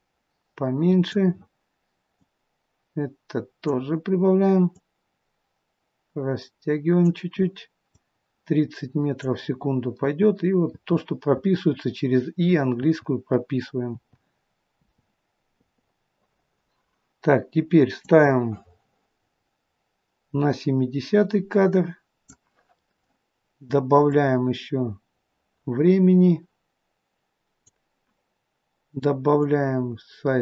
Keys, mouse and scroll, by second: 2.0 click, 4.6 click, 7.9 click, 10.2 i, 10.6 i, 12.6 i, 14.1 i, 15.4 i, 18.1 click, 24.0 click, 29.3 click.